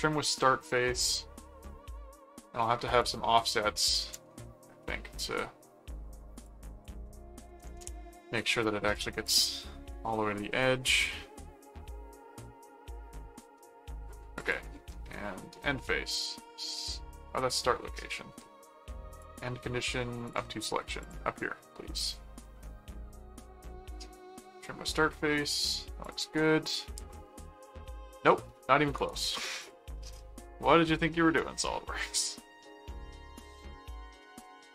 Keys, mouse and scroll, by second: 0.3-0.9 scroll up 2, 0.9 middle click, 3.0 click, 4.8 middle click, 6.3 click, 8.9 click, 10.5-12.6 middle drag, 14.4 click, 19.1 click, 20.3 click, 21.0 click, 21.7-22.7 middle drag, 26.0 click, 27.6 middle click, 29.0 right click, 29.6 click.